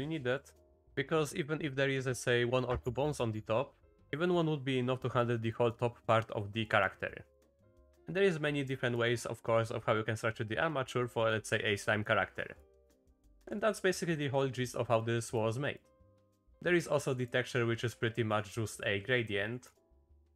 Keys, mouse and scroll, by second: 0.6 shift+click, 5.1-11.5 drag, 11.5 middle click, 11.9 click, 12.7 click, 13.6 click, 15.0 click, 15.8 click, 16.4 middle click, 17.2 click, 18.3 click, 19.3 click.